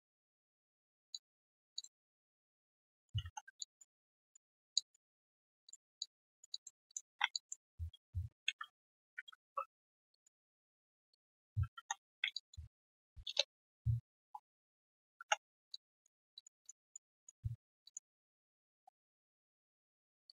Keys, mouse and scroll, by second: 0.2 right click, 1.1 alt+click, 2.5 alt+click, 3.6 alt+click, 4.0 right click, 4.4 scroll down 1, 4.7 alt+click, 6.0 alt+click, 6.3 alt+right click, 6.5 alt+click, 7.1 1, 7.3 alt+click, 8.4 ctrl+shift+x, 10.1 shift+click, 11.1 shift+click, 12.3 alt+click, 13.2 Return, 14.2-15.6 typing, 14.7 right click, 15.3 scroll down 1, 15.7 alt+click, 16.1 alt+right click, 16.3 alt+click, 16.8 alt+right click, 16.8 click, 18.5-19.2 typing, 19.3 right click.